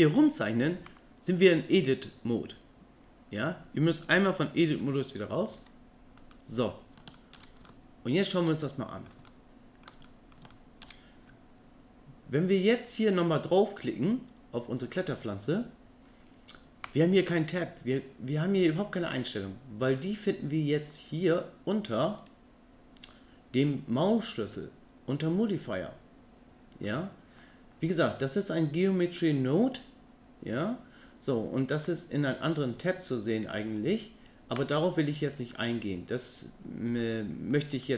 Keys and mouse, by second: 5.6 Tab, 6.3 middle click, 7.2 middle drag, 7.7-8.3 middle drag, 8.6-9.1 middle drag, 9.3-9.8 ctrl+middle drag, 10.1 middle drag, 10.5 shift+middle drag, 13.0 click, 22.2 click, 37.0 middle click, 37.8 shift+middle click.